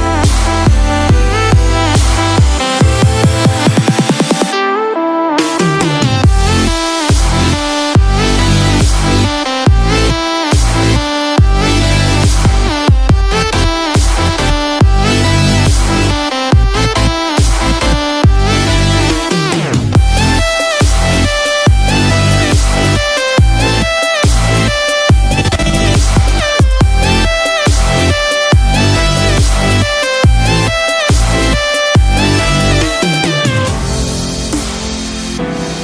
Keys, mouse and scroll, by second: 16.3 scroll up 1, 16.9 middle click, 16.9-17.5 scroll up 3, 17.7 shift+middle click, 18.3-18.8 scroll up 2, 19.1-19.9 scroll down 3, 21.1 click, 23.5 KP_0, 25.9 click, 29.1 scroll up 2, 32.6-33.9 scroll down 3, 33.9 click.